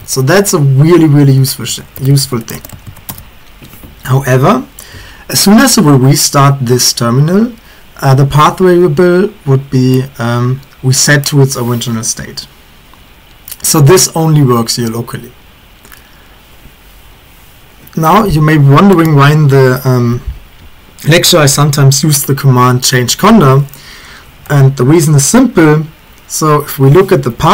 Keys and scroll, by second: 0.0-3.6 typing, 0.4 Return, 27.2 Up, 27.4 Up.